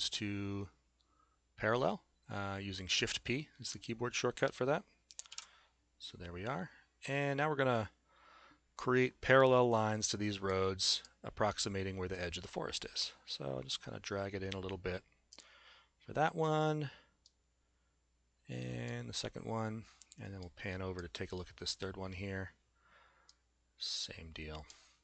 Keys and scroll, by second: 5.4 shift+p.